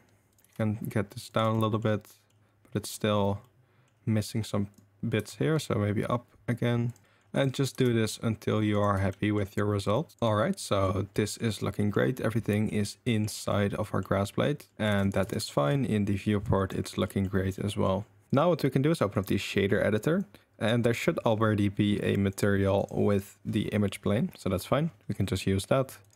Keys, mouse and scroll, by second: 0.4 g, 1.6 drag, 2.1 click, 3.5-3.8 drag, 5.1 g, 7.0 drag, 7.7 g, 9.2 click, 10.0 click, 10.1 shift+g, 11.2 drag, 11.8 click, 12.5 drag, 13.1 click, 13.4 click, 13.8 drag, 14.5 click, 15.0 ctrl+s, 15.2 Tab, 15.6 click, 16.5 click, 17.0 drag, 17.5 drag, 18.4-19.2 drag, 20.1 click, 22.3 click, 23.1 click, 25.1 middle click, 26.0 click.